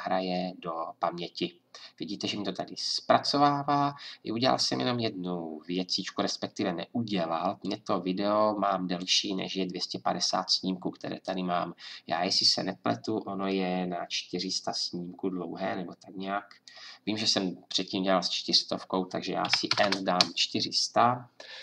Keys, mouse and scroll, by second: 11.3-14.5 drag, 18.5-20.4 drag.